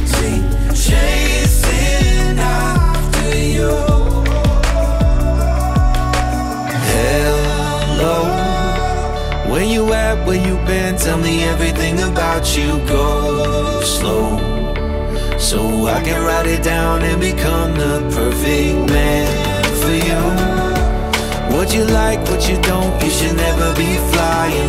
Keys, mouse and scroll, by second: 0.7 scroll down 5, 0.9-1.7 middle drag, 1.7 shift+a, 6.0 scroll down 7, 6.2-6.7 middle drag, 6.7-8.0 drag, 8.0 middle click, 8.4 scroll up 5, 8.6-9.6 middle drag, 9.6 click, 11.0-12.0 middle drag, 12.0-15.9 drag, 18.1-18.4 scroll down 3, 18.4-21.0 middle drag, 21.0 shift+a, 23.4 BackSpace.